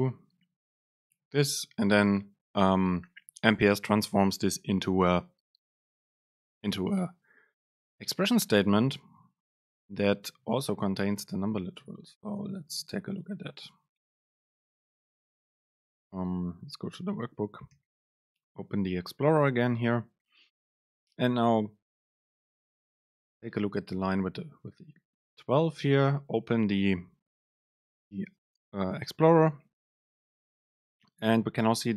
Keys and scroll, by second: 8.8 shift+Left, 9.7 shift+Right, 11.0 Right, 12.2 Up, 12.9 shift+Right, 13.9 shift+Left, 15.2 Up, 17.8 ctrl+x.